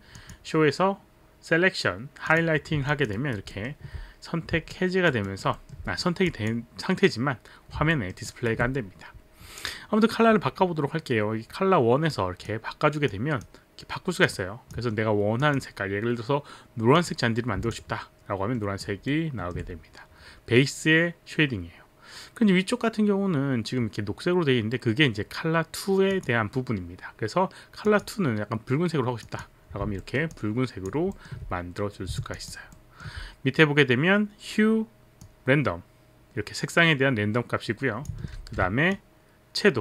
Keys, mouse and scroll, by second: 0.2 click, 2.3 click, 2.9 alt+click, 3.1 alt+right click, 3.5 alt+middle click, 4.7 alt+click, 5.2 alt+right click, 5.6 alt+middle click, 5.6 alt+right click, 6.3 click, 7.9 alt+middle click, 8.6 alt+right click, 12.1 click, 14.3 click, 15.4 click, 16.9 click, 19.1 alt+middle click, 26.1 click, 27.8 click, 29.3 click, 30.0 alt+middle click, 30.4 alt+click, 31.1 alt+middle click, 32.4 alt+click, 32.8 alt+middle click, 35.2 click, 38.6 ctrl+z, 38.9 click.